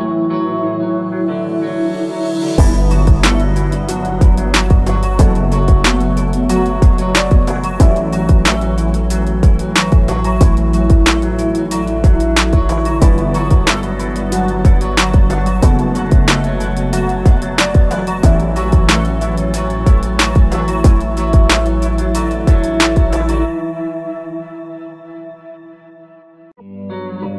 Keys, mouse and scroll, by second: 8.4 scroll up 1, 8.9 scroll down 1, 9.5-10.0 scroll up 2, 10.0 click, 10.7 scroll down 1, 11.5-12.1 scroll down 2, 12.8-13.7 scroll up 3, 14.1 scroll down 1, 16.7 click.